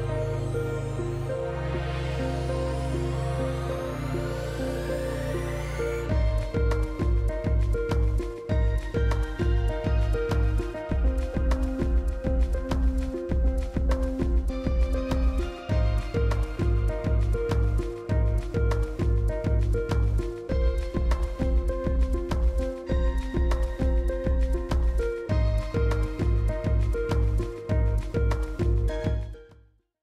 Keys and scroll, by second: 7.6 Return, 12.6 ctrl+z, 15.9 ctrl+z, 17.9 ctrl+z, 20.8 ctrl+z.